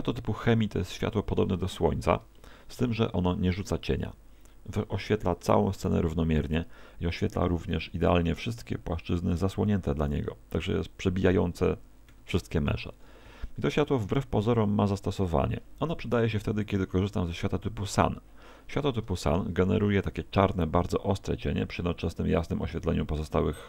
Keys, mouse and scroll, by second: 0.1 click, 2.4 shift+middle click, 12.1 Escape, 16.7 click.